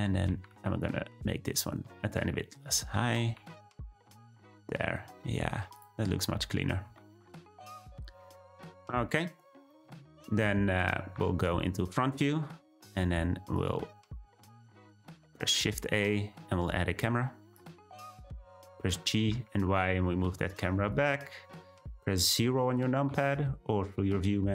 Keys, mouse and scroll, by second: 0.0 Tab, 0.3 a, 0.5 s, 2.9 Tab, 3.3 g, 4.9-5.7 middle drag, 5.7 click, 6.2 scroll down 1, 6.4-7.0 middle drag, 8.9-9.7 scroll down 2, 9.7-11.1 middle drag, 12.4-13.5 scroll down 1, 13.5 drag, 15.1 drag, 15.5 shift+a, 18.0-18.6 middle drag, 18.6-18.9 scroll down 1, 18.9 g, 23.1 `.